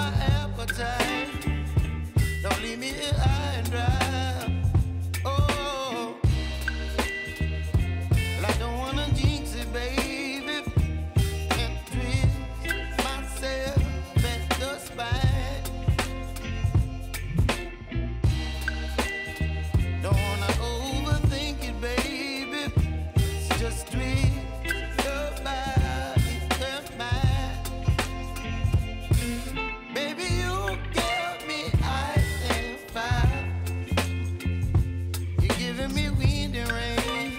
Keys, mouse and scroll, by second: 1.7 ctrl+c, 2.0 ctrl+v, 2.5 click, 3.3 F9, 4.1-7.9 drag, 7.9-9.4 drag, 9.6 space, 11.8 click, 12.9-14.9 alt+drag, 15.2 space, 17.5 click, 18.3 alt+click, 18.9-20.1 typing, 20.2 Down, 20.8 Return, 21.5-26.0 drag, 27.1 ctrl+a, 27.9 4, 29.3-37.3 drag.